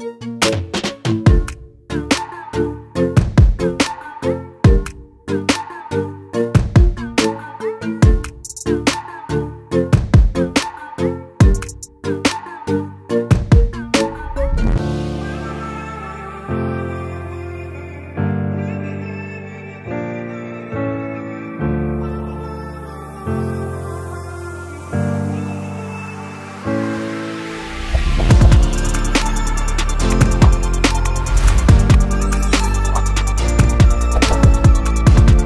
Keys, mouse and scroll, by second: 1.9-4.7 drag, 4.9-11.5 drag, 18.6-28.6 drag, 29.6-32.7 drag, 32.7 click.